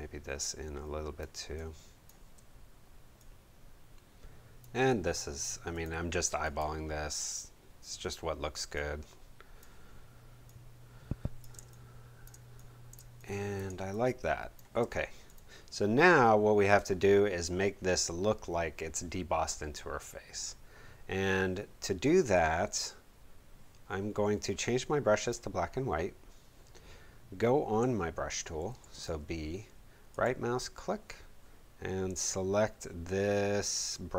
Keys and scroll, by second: 1.3 space, 11.5 space, 28.6 b.